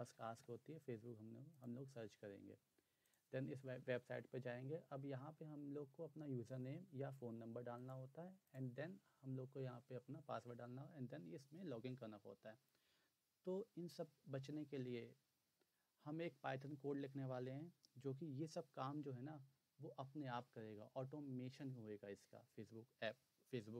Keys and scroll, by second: 0.0-0.5 typing.